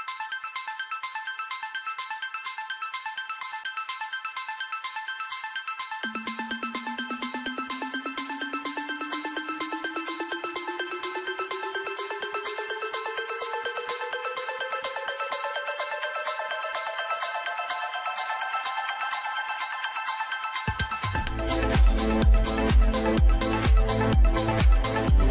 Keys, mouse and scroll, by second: 0.0 g, 0.6-1.2 middle drag, 1.3-1.7 middle drag, 1.7 s, 2.2 scroll up 3, 2.3 middle click, 2.9 g, 3.4-3.8 middle drag, 3.8 scroll up 3, 3.9-4.3 middle drag, 4.3 g, 4.9 scroll down 1, 5.0 middle click, 5.5 scroll up 3, 5.7 shift+middle click, 6.0 s, 6.7 g, 7.5 scroll down 5, 7.6 middle click, 8.2 middle click, 8.7 scroll up 4, 8.8 middle click, 9.1 KP_7, 9.3-10.0 scroll up 4, 10.0 g, 11.9-12.3 scroll down 6, 12.4 middle click, 13.0 Tab, 13.4 middle click, 14.2 click, 14.4 click, 14.8 click, 15.2 alt+shift+click, 15.6 alt+shift+click, 15.9 middle click, 16.7 alt+shift+click, 17.1 scroll down 2, 17.3 middle click, 17.8 scroll up 1, 18.1 middle click, 18.5 scroll down 3, 18.7 shift+middle click, 18.9 scroll up 1, 19.7 e, 22.9-23.2 scroll down 2, 23.2 Tab, 23.5-23.9 middle drag, 23.9 scroll up 3, 24.1-25.3 middle drag.